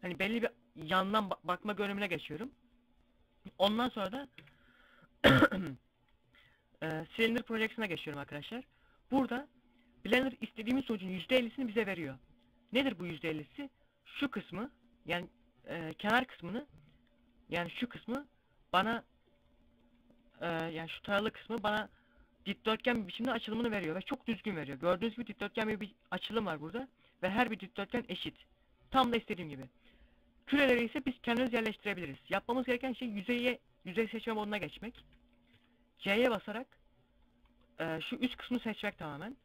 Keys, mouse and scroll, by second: 2.9 scroll down 1, 3.9 u, 6.3 u, 7.8 scroll down 1, 9.2 scroll down 2, 23.6 scroll up 1, 24.3 scroll down 1, 27.4 scroll down 1, 28.7 middle click, 32.6 click, 33.8 middle click, 34.5 a, 37.1 right click.